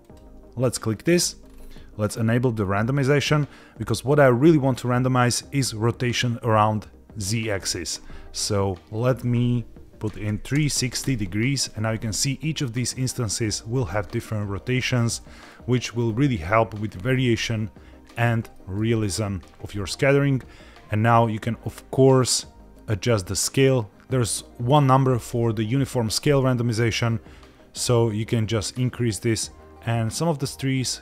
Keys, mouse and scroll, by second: 0.1 click, 1.0 click, 1.4-4.0 scroll down 2, 4.0-4.7 scroll down 3, 8.9-11.1 drag, 15.1 middle click, 15.9-16.8 scroll down 2, 16.8 scroll down 1, 17.3 middle click, 18.5 shift+middle click, 27.9-31.0 drag.